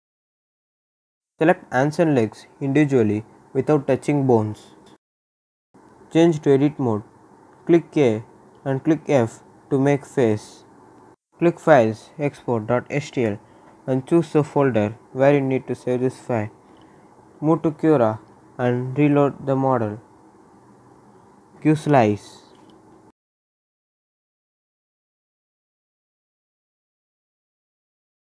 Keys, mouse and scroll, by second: 1.7 ctrl+z, 2.4 shift+click, 5.3 click, 7.3 a, 8.5 g, 9.5 click, 10.6 ctrl+z, 10.9 f, 11.3 ctrl+s, 12.0 click, 16.2 right click, 19.4 click, 20.1 scroll down 1, 21.2 scroll up 1, 22.1 click, 22.7-24.3 right drag, 24.3-24.7 scroll down 1, 24.7-27.8 right drag.